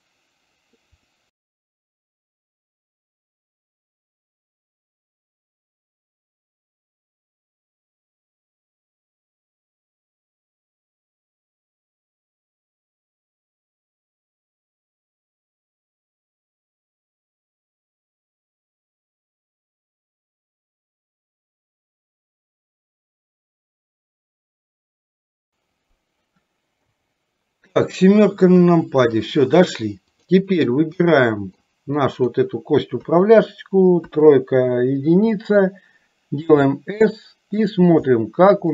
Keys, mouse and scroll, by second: 1.0 click, 1.5 click, 2.0 ctrl+p, 2.4 click, 3.1 click, 3.6 ctrl+p, 4.0 click, 4.6 middle click, 5.0 click, 5.6 KP_7, 6.1 middle click, 6.6 shift+click, 6.9 click, 7.2 KP_7, 7.9 click, 8.1 click, 8.3 ctrl+p, 8.6 middle click, 8.9 click, 9.2 click, 9.6 click, 9.9 middle click, 10.2 middle click, 10.4 click, 10.7 ctrl+p, 11.0 middle click, 11.3 click, 11.5 click, 11.9 click, 12.2 ctrl+p, 12.5 middle click, 12.8 click, 13.4 click, 13.8 ctrl+p, 14.0 middle click, 14.4 click, 14.7 shift+click, 14.9 click, 15.3 ctrl+p, 15.5 middle click, 15.8 click, 16.0 shift+click, 16.3 click, 16.6 click, 16.7 ctrl+p, 17.0 middle click, 17.4 click, 17.6 shift+click, 17.9 click, 18.2 ctrl+p, 18.6 KP_7, 19.2 click, 19.4 middle click, 19.9 click, 20.0 shift+click, 20.3 click, 20.5 click, 20.7 ctrl+p, 21.2 click, 21.5 middle click, 22.1 click, 22.4 click, 22.6 ctrl+p, 22.7 middle click, 23.1 click, 23.7 click, 23.9 click, 24.0 ctrl+p, 24.3 middle click, 24.5 click, 25.0 click, 25.2 click, 25.4 ctrl+p, 27.0 KP_7, 30.1 click, 31.2 middle click, 32.3 click, 33.2 KP_3, 34.2 KP_1, 36.5 s, 38.4 middle click.